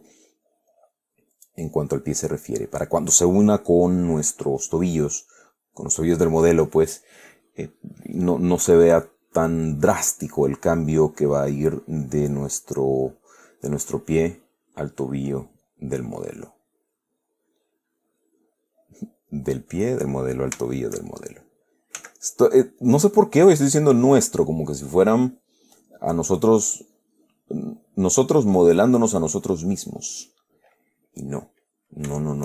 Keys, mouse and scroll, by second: 1.0-3.1 drag, 5.1-7.9 drag, 9.5-10.9 drag, 12.3-13.7 middle drag, 14.1-15.4 middle drag, 15.9 click, 17.1-18.0 middle drag, 18.9 click, 19.8-20.5 middle drag, 20.9-21.9 shift+middle drag, 21.5 shift+click, 22.3 f, 23.1 click, 24.5-25.6 drag, 26.2-26.7 middle drag, 27.1-28.8 drag, 28.9-31.7 middle drag, 31.8-32.4 middle drag.